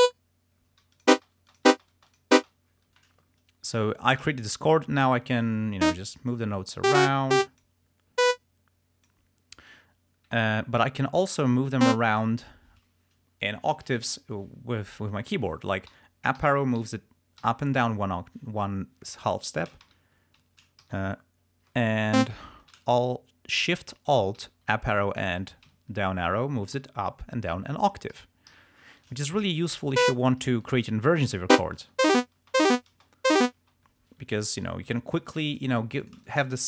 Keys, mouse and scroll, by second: 0.0 click, 1.1 click, 1.3 space, 1.6 click, 2.2 click, 3.4 ctrl+scroll up 2, 6.1 click, 6.9 click, 8.3 click, 11.9 click, 16.0 Up, 16.5 Down, 16.9 Up, 17.5 Down, 19.9 shift+Up, 20.5 shift+Down, 20.9 alt+shift+Up, 22.3 alt+click, 24.5 alt+shift+Up, 25.8 alt+shift+Down, 26.8 alt+shift+Up, 28.2 alt+shift+Down, 28.6 alt+shift+Up, 30.1 click, 30.8 alt+shift+Down, 31.7 alt+shift+space, 34.7 g, 35.6 click, 35.9 s, 36.2 shift+click, 36.4 shift+right click.